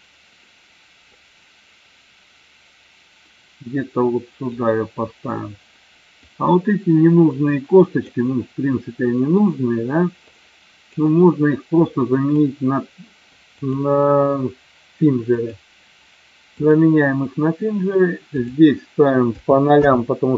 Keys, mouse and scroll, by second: 1.1-4.5 drag, 6.3-8.3 drag, 8.9-9.5 middle drag, 10.2-11.1 drag, 12.0-12.6 drag, 13.6-15.6 drag, 16.6 click, 18.4-20.3 drag.